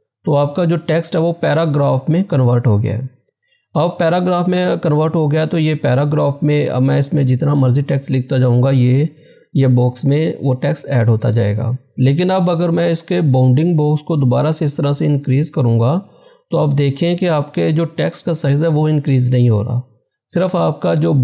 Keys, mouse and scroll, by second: 14.2 click, 14.2-19.0 drag.